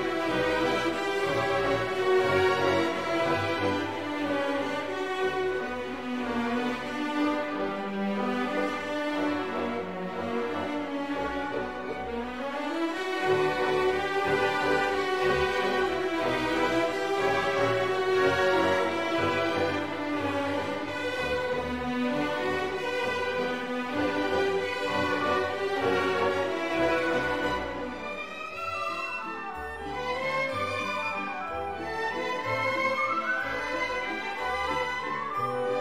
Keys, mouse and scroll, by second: 4.8 click, 5.4 click, 6.7 click, 7.9 click, 10.0-13.1 typing, 17.0 Return, 17.6 click, 18.0 click, 18.5 click, 20.4-23.6 drag, 24.0 click, 25.4 click, 26.2 click, 27.1 click, 33.6 click.